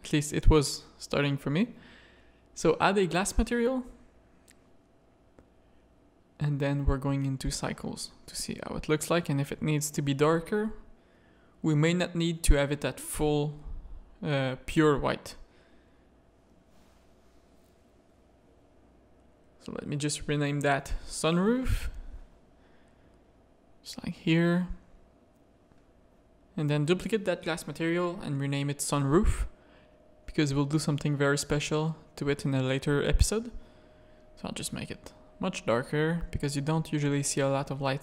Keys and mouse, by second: 0.8 middle click, 2.8 alt+a, 2.8 middle click, 3.7 middle click, 4.0 z, 5.3-6.9 drag, 9.8-14.1 middle drag, 14.7 click, 19.7-22.8 drag, 21.6 o, 23.7 click, 26.2 click, 26.8 click, 28.7 o, 29.7 click, 30.3 drag, 33.2 middle click, 34.1 alt+a, 34.2-35.1 middle drag, 36.0-37.2 middle drag.